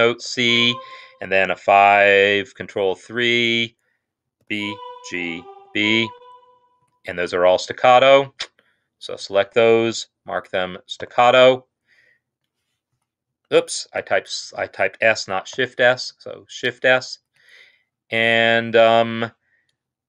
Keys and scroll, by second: 0.3 typing, 1.3 typing, 2.8 ctrl+3, 4.3-5.5 typing, 6.7 Escape, 7.3 shift+Left, 8.4 shift+Left, 10.9 s, 12.8 Escape, 13.9 ctrl+z, 15.4 shift+s, 17.2 Escape.